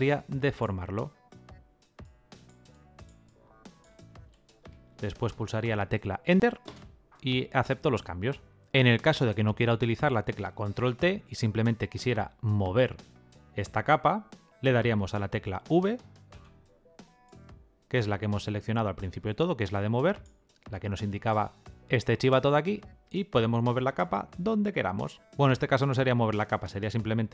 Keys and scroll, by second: 6.2 Return, 10.4 ctrl+t, 15.3 v.